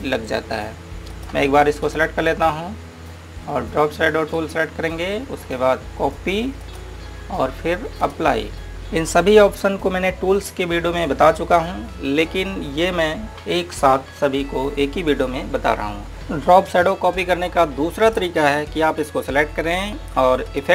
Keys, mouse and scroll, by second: 2.1 click, 19.1 click.